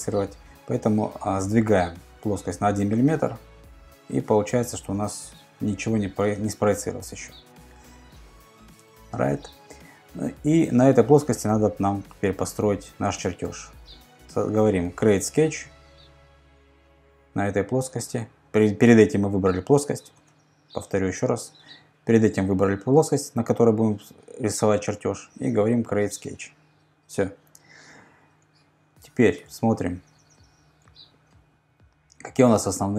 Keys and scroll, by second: 3.0 Return, 3.4 Return, 20.2 super+z, 29.5 super+Tab.